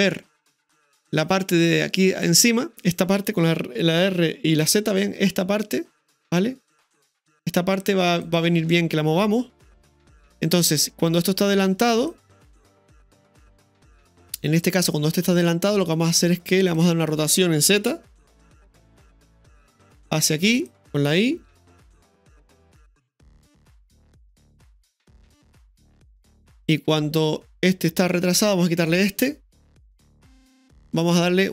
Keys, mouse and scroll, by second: 1.1 click, 2.1 right click, 4.0 r, 8.7 ctrl+z, 10.2-12.6 drag, 12.6-16.6 middle drag, 16.6 right click, 18.2 r, 21.5 i, 22.8-28.8 drag, 28.8 right click, 29.8 Delete, 31.3 right click.